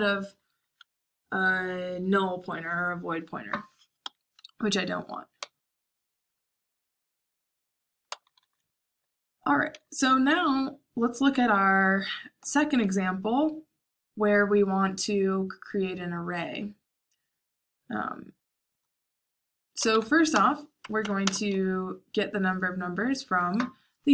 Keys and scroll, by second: 4.0 Escape, 5.3 j, 7.8-10.4 typing, 19.6-21.2 typing.